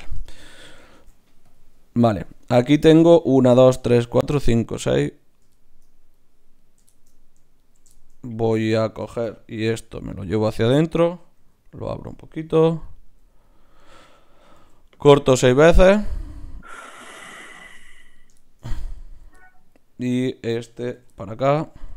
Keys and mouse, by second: 0.9 ctrl+Tab, 2.0-3.7 drag, 6.6-9.6 right drag, 9.8 e, 11.4 s, 12.5 g, 13.0 s, 14.6 ctrl+r, 18.0-19.6 right drag, 18.4-19.7 drag, 19.7 middle click, 20.3 click, 20.3 right click, 21.0-21.9 f.